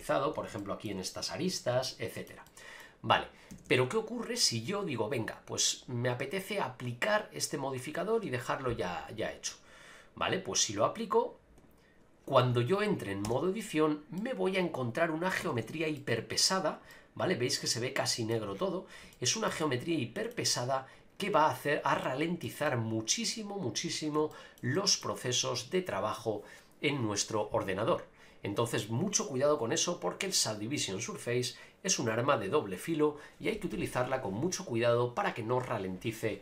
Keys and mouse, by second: 0.6 shift+middle drag, 1.8-2.2 shift+middle drag, 2.4 middle click, 3.9-6.7 drag, 10.4-11.6 drag, 13.2 Tab, 14.2-15.3 middle drag, 15.4 a, 15.5 a, 15.9 middle click, 16.9-18.3 middle drag, 19.1 shift+middle click, 19.6 middle click, 22.0 shift+middle click, 22.6-23.7 middle drag, 24.3 shift+middle click, 24.7 middle click.